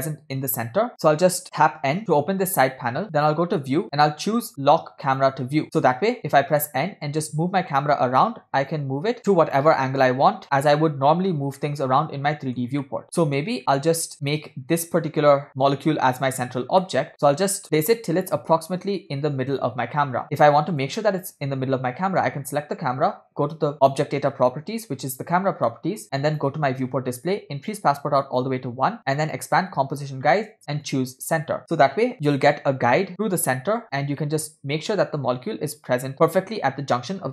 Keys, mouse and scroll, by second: 1.6 n, 3.2 click, 5.1 click, 6.5 n, 6.8-10.6 middle drag, 11.7-12.8 shift+middle drag, 12.9 shift+middle click, 13.9-14.4 ctrl+shift+middle drag, 14.9 click, 17.0-19.4 shift+middle drag, 20.8 click, 23.8 click, 26.2 click, 26.9-27.7 scroll down 2, 27.7-28.5 drag, 29.4 scroll down 1, 29.5 click, 30.4 scroll down 1, 31.0 click, 34.4-36.4 shift+middle drag.